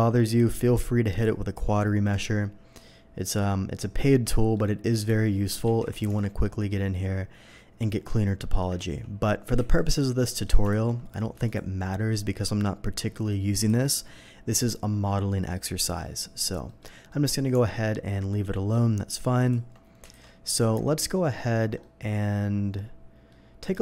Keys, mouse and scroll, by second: 1.1 click, 2.1 click, 4.1-4.5 middle drag, 5.0 ctrl+1, 5.6 ctrl+z, 5.7 ctrl+1, 6.0 Tab, 6.4 middle click, 8.8 ctrl+z, 10.3 middle drag, 10.7 alt+v, 11.4 click, 13.6 n, 17.1 middle drag, 17.5 Tab, 18.5 middle click, 19.4 alt+click, 20.1 alt+a, 20.6 Tab, 20.9 alt+a, 20.9-21.3 middle drag, 21.5 scroll down 1, 21.8-23.3 middle drag.